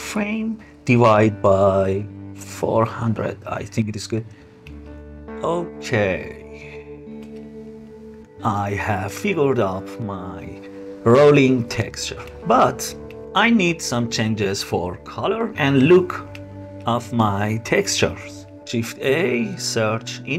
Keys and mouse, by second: 3.6 middle click, 3.6 KP_0, 4.7 space, 6.6-7.4 middle drag, 11.1 click, 11.3 middle click, 12.1 click, 12.2 middle click, 12.3 click, 14.3-15.7 drag, 16.4 space, 17.3-18.5 middle drag, 18.6 shift+a.